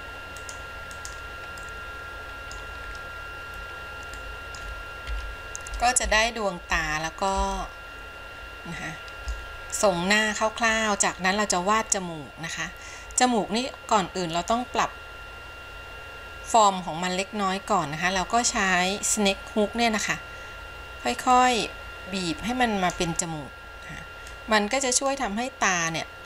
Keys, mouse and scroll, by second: 0.6 click, 1.2 click, 1.8 middle click, 3.0-4.3 scroll down 2, 4.3 middle click, 5.3 KP_1, 6.2-6.7 shift+scroll up 1, 6.8-7.7 shift+scroll up 3, 7.7-9.5 shift+middle drag, 14.4 click, 21.5-23.2 drag, 24.5 click, 26.1 click.